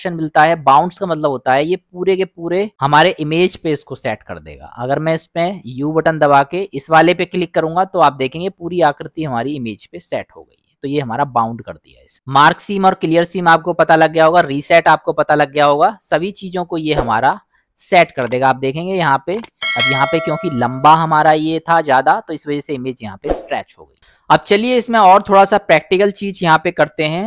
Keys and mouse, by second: 5.8 u, 17.8 middle click, 19.1 middle click, 24.0 middle click, 25.2-26.0 drag, 26.4 click.